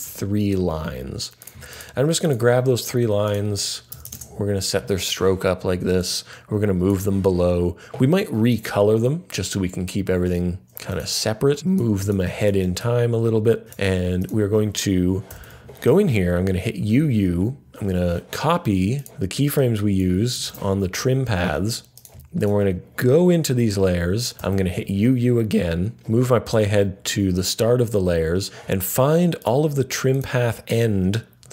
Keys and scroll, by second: 3.6-4.5 typing, 15.3 typing, 20.4 super+c, 24.4 typing.